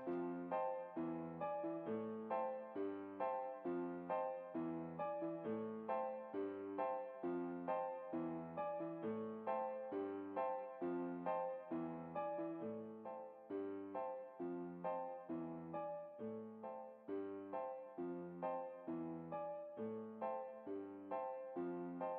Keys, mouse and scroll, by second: 1.5-3.0 right drag, 1.9 s, 5.4-6.8 right drag, 5.7 s, 7.7 middle click, 10.6 alt+a, 14.9 Escape, 22.1 click.